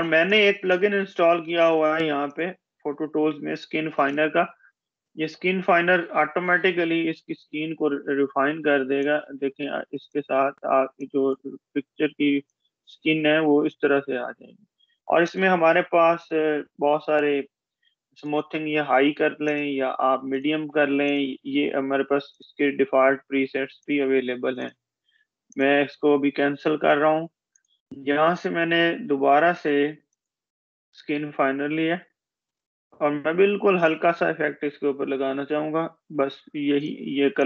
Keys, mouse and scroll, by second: 9.2-10.9 drag, 17.8 click, 36.5 click.